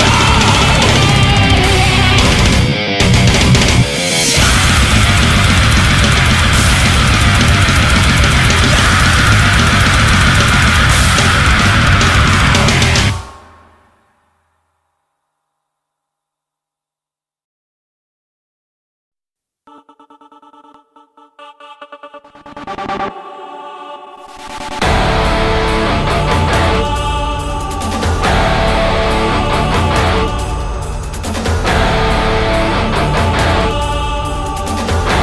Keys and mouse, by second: 1.0 right click, 1.7 right click, 3.1 right click, 3.5 right click, 3.9 ctrl+s, 5.0 ctrl+z, 5.3 right click, 5.8 right click, 7.9 right click, 9.1 right click, 9.7 ctrl+z, 10.1 ctrl+z, 10.5 right click, 11.9 right click, 12.3 right click, 12.5 ctrl+z, 12.7 right click, 13.1 ctrl+z, 13.4 ctrl+z, 14.9 ctrl+z, 15.7 right click, 16.2 right click, 16.9 right click, 17.1 right click, 17.5 right click, 17.6 ctrl+z, 19.0 right click, 19.3 right click, 19.9 right click, 20.9 right click, 21.1 right click, 23.4 right click, 24.9 right click, 26.2 right click, 26.5 right click, 26.9 right click, 27.2 ctrl+z, 27.5 right click, 28.1 right click, 28.9 right click, 30.5 right click, 30.8 right click, 31.2 ctrl+z, 31.5 right click, 32.1 ctrl+z, 32.5 right click, 32.9 ctrl+z, 33.3 right click, 33.7 right click, 34.1 right click, 34.8 right click.